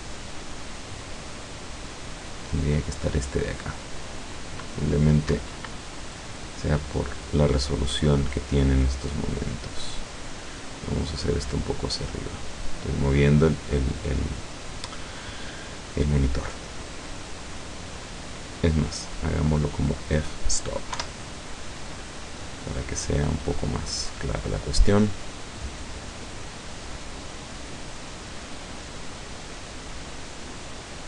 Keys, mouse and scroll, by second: 5.4 Escape, 6.2 right click, 7.4-7.8 scroll down 1, 9.2 click, 10.4 click, 10.9-12.9 drag, 17.2 click, 19.0 click, 21.0 F12.